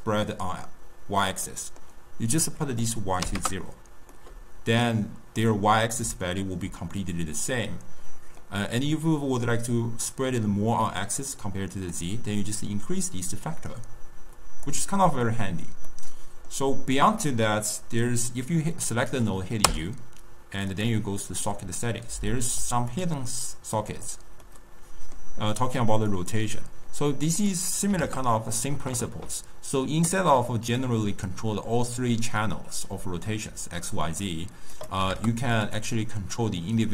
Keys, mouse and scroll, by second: 2.8-4.1 drag, 4.1-5.4 middle drag, 5.4 scroll up 2, 5.4-6.0 scroll down 2, 6.0 d, 6.5 d, 6.6 d, 8.4-11.4 middle drag, 11.9-14.9 drag, 15.8 middle click, 16.5-17.1 scroll up 1, 17.1 click, 19.6 u, 24.4-26.0 middle drag, 26.0-30.5 drag, 30.7-33.9 drag, 34.7-35.7 drag, 36.3-36.9 drag.